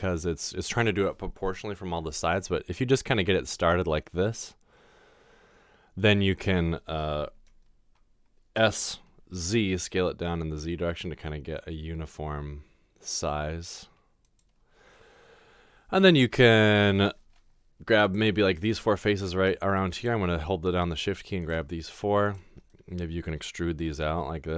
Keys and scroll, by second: 8.6-9.3 typing, 23.8 e.